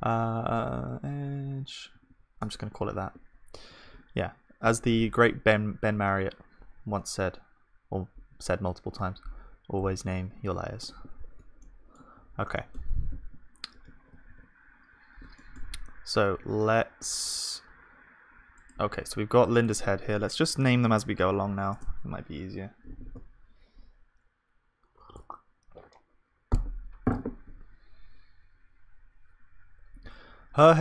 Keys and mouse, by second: 2.1 BackSpace, 8.3-10.8 drag, 8.3-10.8 middle drag, 8.3-10.8 right drag, 11.6-12.8 drag, 11.6-15.8 middle drag, 11.6-12.8 right drag, 14.3 ctrl+s, 16.4 s, 19.7-24.3 drag.